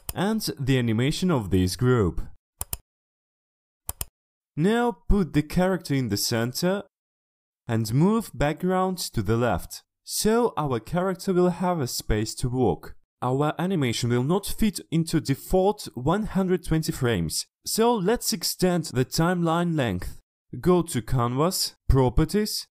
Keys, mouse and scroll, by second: 2.1 click, 2.7 right click, 3.7 click, 6.2-6.6 drag, 6.9 click, 7.2 click, 7.7 click, 8.1 click, 8.3 click, 8.8 click, 9.2-10.7 shift+drag, 11.1 shift+click, 11.5 shift+click, 14.1 click.